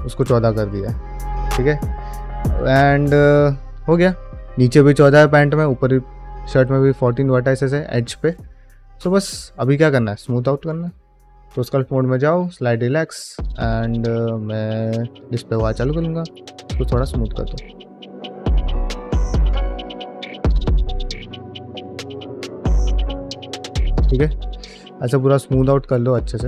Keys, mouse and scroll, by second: 6.0 middle click, 10.3 middle click, 10.7 ctrl+Tab, 13.3 q, 15.6-19.3 shift+drag, 19.7 ctrl+middle click, 19.8 shift+middle click, 20.0 f, 20.2 shift+click, 21.3 ctrl+z, 21.5-23.4 shift+drag, 23.6 ctrl+middle click, 24.0-26.4 shift+drag.